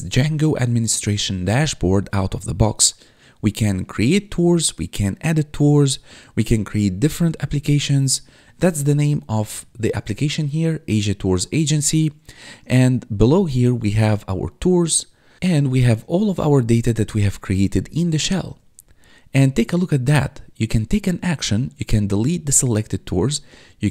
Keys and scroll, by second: 10.1 1, 12.8 1, 16.2 1, 18.7 1.